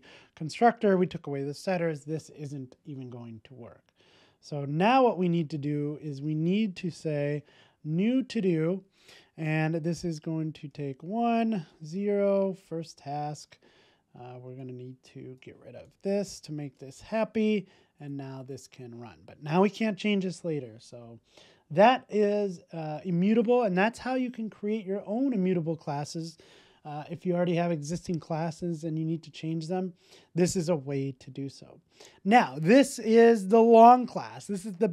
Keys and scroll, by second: 16.6 Tab, 17.5 super+s.